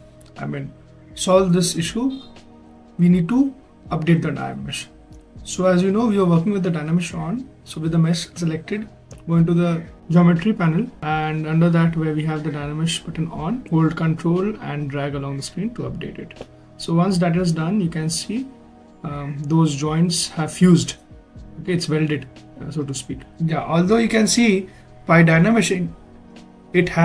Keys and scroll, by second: 5.2 shift+f, 23.7 shift+f.